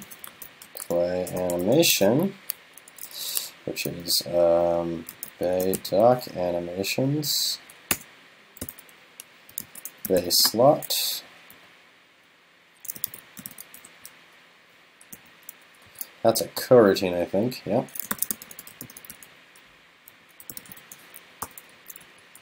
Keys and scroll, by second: 15.9 super+Left, 21.8 super+Right.